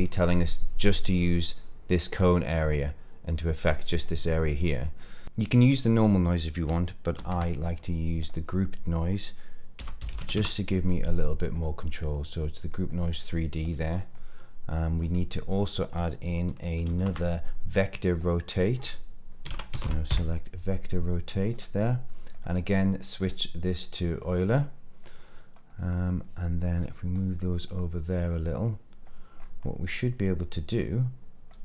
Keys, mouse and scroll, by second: 1.0-1.5 middle drag, 2.6-3.6 middle drag, 4.3-5.0 middle drag, 7.1 shift+a, 12.8 click, 13.9 scroll up 1, 14.1 middle click, 15.0 click, 16.8 shift+a, 23.1-24.3 drag, 24.6 middle click, 25.1-25.7 scroll down 4, 25.6 middle click, 26.7-27.1 drag, 27.5 click, 28.6 click, 29.3 scroll up 2, 29.6 middle click, 30.3-31.5 drag.